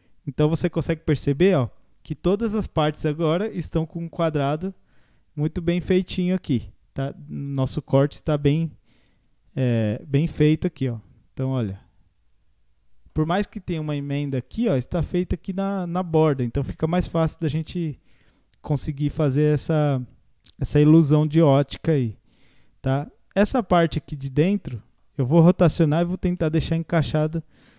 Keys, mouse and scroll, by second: 4.1-4.7 scroll up 1, 4.7-9.2 middle drag, 9.2 q, 10.2 Tab, 10.6 scroll down 1, 10.9-13.4 middle drag, 13.4 scroll up 1, 13.7-16.2 middle drag, 16.2-17.0 scroll down 4, 17.0-21.5 middle drag, 21.5 Tab, 21.8-23.4 scroll up 4, 23.4 click, 24.5-26.0 middle drag, 26.0 scroll up 1, 26.4-27.7 middle drag.